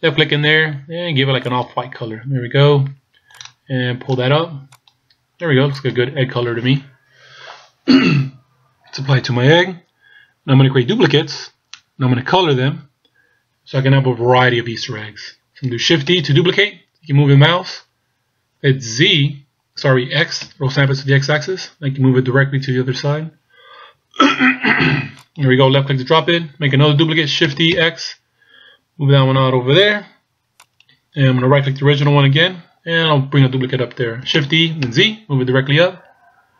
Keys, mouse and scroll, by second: 4.8 click, 5.7 click, 9.3-12.3 scroll down 2, 12.3-12.8 scroll down 1, 13.8-16.3 scroll down 1, 16.3 shift+d, 27.6 shift+d, 30.7 right click, 32.1-33.6 scroll down 2, 34.5 shift+d.